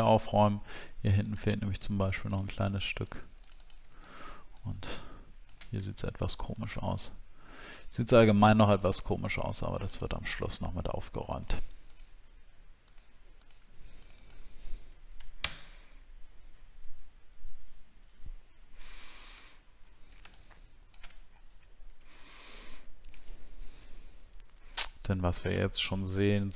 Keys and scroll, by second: 15.4 ctrl+BackSpace, 18.8 ctrl+d, 19.4 alt+scroll down 1, 21.2 alt+scroll down 5.